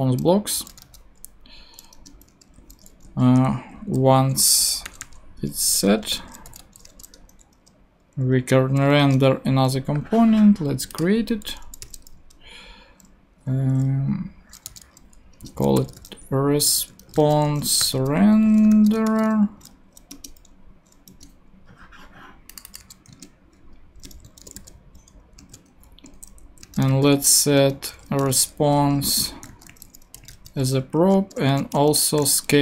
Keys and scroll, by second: 0.6-2.3 typing, 3.5 shift+Left, 4.1 alt+shift+Left, 4.9 alt+shift+i, 5.6 shift+super+i, 5.7 shift+super+Right, 6.0 super+space, 6.5 shift+7, 6.8 shift+space, 8.5 shift+9, 9.0 shift+Return, 9.6 Return, 11.8 super+n, 14.4-19.6 typing, 20.1 Return, 23.1 ctrl+super+c, 23.9 ctrl+Tab, 24.3 shift+,, 24.6 shift+super+v, 25.4 super+v, 25.5 super+space, 25.5 /, 26.1 Left, 26.6-32.6 typing, 31.0 Right.